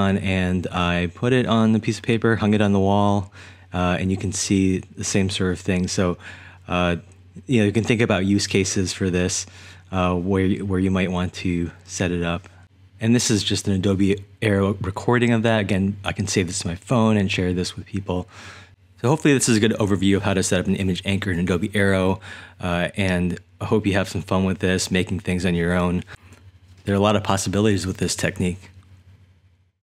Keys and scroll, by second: 18.6-24.0 typing, 25.2-27.5 typing.